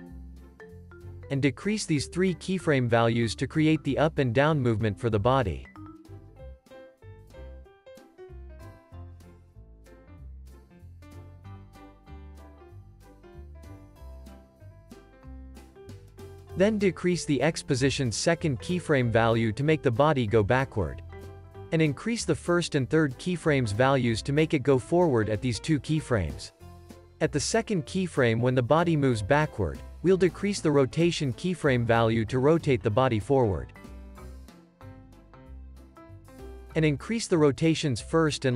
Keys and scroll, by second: 0.4 x, 2.6 alt+shift+s, 3.6 z, 4.1 x, 5.4 z, 6.6 x, 10.1 z, 12.0 x, 13.7 z, 16.1 x, 16.7 x, 19.1 alt+shift+s, 21.6 z, 23.8 alt+shift+w, 25.9 x, 32.0 z, 33.2 x, 34.5 alt+shift+s, 37.0 z.